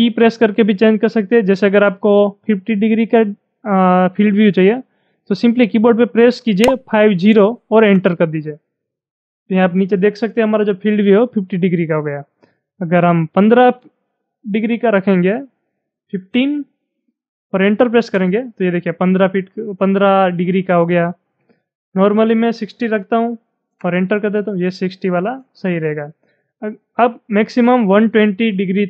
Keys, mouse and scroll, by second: 6.6-6.9 typing, 7.7 Return, 15.5-16.4 typing, 17.9 Return, 21.8-23.0 typing, 23.6 Return, 27.4-28.7 typing.